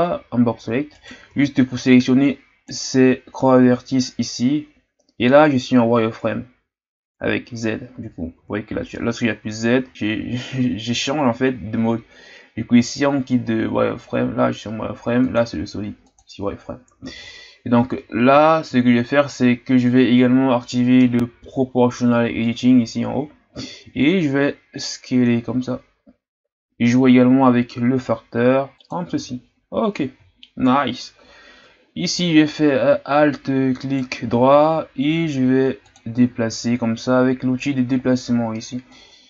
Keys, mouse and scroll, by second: 0.9 right click, 1.3 b, 7.6 z, 8.0 z, 8.8-9.9 z, 15.3 click, 16.1-19.1 drag, 22.4 click, 24.1 s, 29.4-30.5 shift+scroll up 1, 30.5-33.7 shift+scroll up 6, 33.8-35.8 alt+right drag, 35.8-39.2 drag.